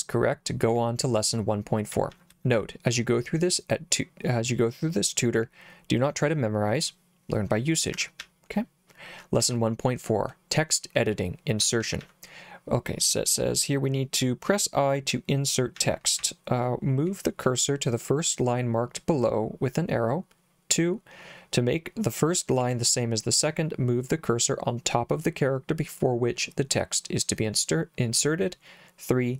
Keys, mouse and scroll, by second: 1.9-2.9 typing, 8.0 Escape, 8.2 j, 9.4 j, 11.6 j, 11.8 j, 12.0 j, 15.8 j, 16.2 k.